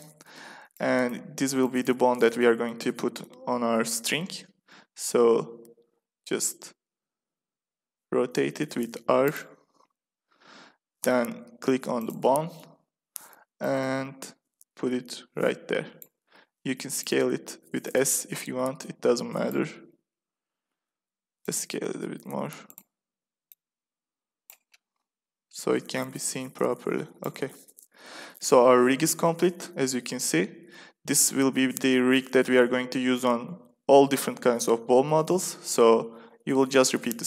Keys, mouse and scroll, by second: 2.4-3.5 middle drag, 5.0 r, 11.0 middle click, 11.3 middle click, 12.0-13.5 drag, 13.5-15.2 middle drag, 15.2 click, 16.2 s, 17.8-19.3 drag, 19.6-22.3 middle drag, 20.6 s, 21.9 s, 23.4-25.2 drag, 25.4 middle click, 28.4 a, 28.7 a, 29.0-31.9 middle drag.